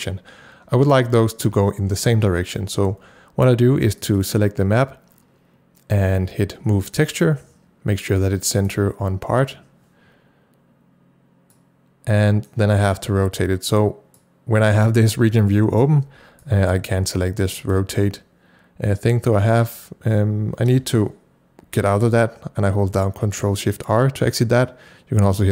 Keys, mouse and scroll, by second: 3.8 click, 3.9 c, 4.0 double click, 4.2 click, 7.2 click, 8.6 click, 11.5-25.5 drag, 21.8 ctrl+shift+r.